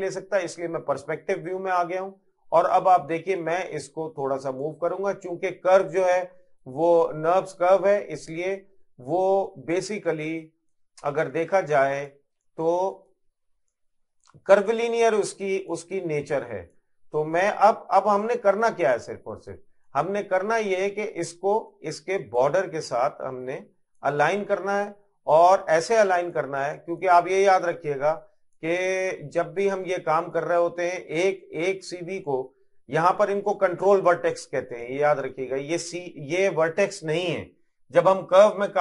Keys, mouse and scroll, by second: 1.4 click, 4.9 middle click, 6.7 click, 8.9 middle click, 11.6 click, 12.5 middle click, 14.9 click, 18.9 middle click, 19.9 shift+middle click, 21.1 middle click, 22.4 click, 24.2 middle click, 25.6 click, 28.9 middle click, 30.4 click, 32.3 middle click, 33.6 middle click, 34.7 click, 35.4 middle click, 36.5 middle click, 38.1 click.